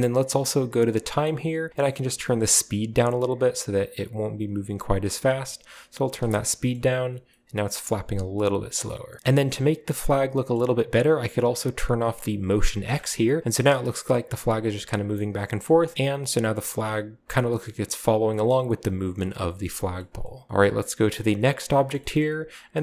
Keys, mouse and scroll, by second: 0.9-1.6 drag, 2.4-6.2 shift+drag, 8.2-9.2 scroll down 1, 9.2-10.2 scroll down 1, 10.2-10.6 scroll up 1, 10.8-11.3 middle drag, 12.8 click, 13.3 middle click, 14.1-14.8 middle drag, 18.3-19.3 middle drag, 20.0 middle drag, 20.5-21.4 scroll up 2, 20.6 middle click, 21.6 right drag, 21.9-22.6 scroll up 2.